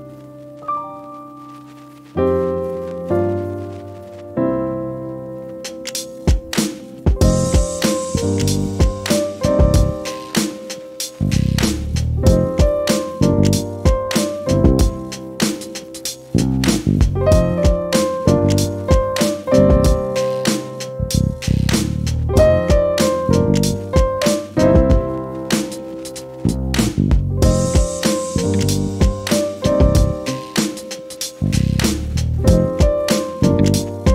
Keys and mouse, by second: 1.5 -, 2.5 =, 3.7 =, 5.1 space, 5.9 -, 9.0 click, 9.4 click, 10.9 click, 11.8 click, 13.7 click, 15.3 ., 16.7 click, 17.3 =, 18.3 click, 20.0 -, 20.9 click, 21.3-23.1 typing, 23.7 click, 25.3 F12, 26.1 =, 27.7 click, 30.1-33.2 drag.